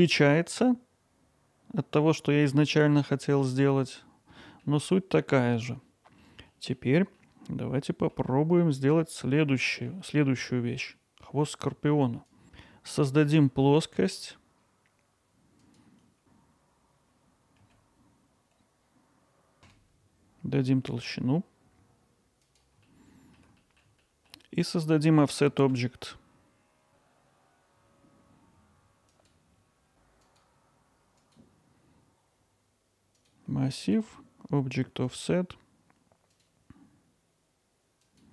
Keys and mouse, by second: 0.0 middle drag, 2.6 middle click, 4.4 middle drag, 4.8-6.2 alt+middle drag, 6.5 drag, 6.6 middle drag, 7.2-8.2 middle drag, 9.4-9.9 middle drag, 10.9 middle click, 11.7 middle click, 12.4 click, 12.4 shift+s, 17.3 y, 19.0 click, 19.2 ctrl+alt+middle click, 19.7 e, 22.4 click, 22.9 alt+middle click, 23.6 middle click, 24.0 alt+middle click, 30.2-31.3 drag, 33.2 click, 34.0 click, 35.1 click, 36.4 click.